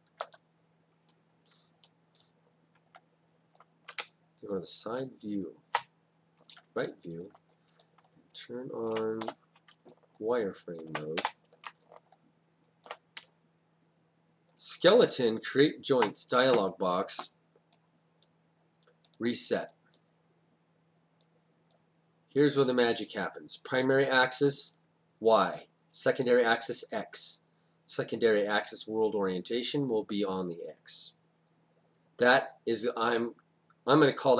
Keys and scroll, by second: 0.1 0, 0.2 Return, 4.0 space, 9.2 4, 11.2 ctrl+space, 13.3 space.